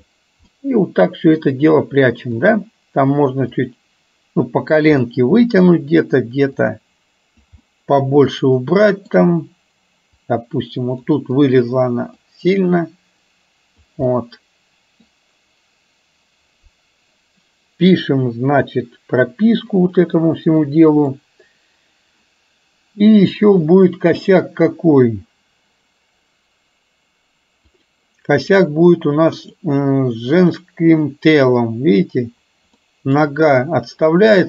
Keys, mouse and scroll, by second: 0.6 middle click, 2.5 click, 3.7-4.9 drag, 5.1 middle click, 6.6 click, 7.7-9.1 middle drag, 10.4 click, 11.5 click, 12.5-13.9 drag, 14.2 middle click, 19.9 click, 20.7 middle click, 23.4-28.0 drag, 29.5 click, 30.5 click, 33.0 middle click.